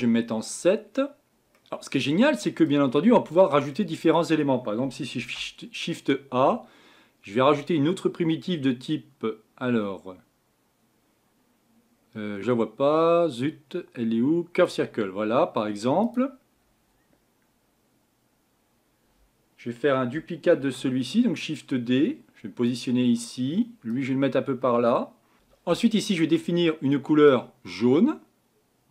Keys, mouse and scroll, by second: 20.6 shift+d, 25.6-27.4 middle drag, 27.4 click.